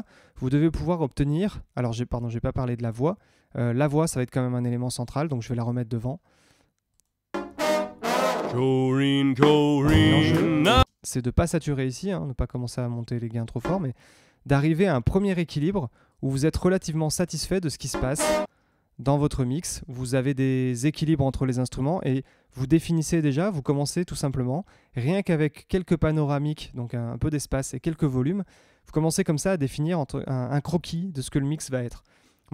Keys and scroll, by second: 3.9 Tab, 7.3 space, 8.5 Tab, 10.7 space, 13.6 space, 16.8 Tab, 17.9 space, 19.3 Tab.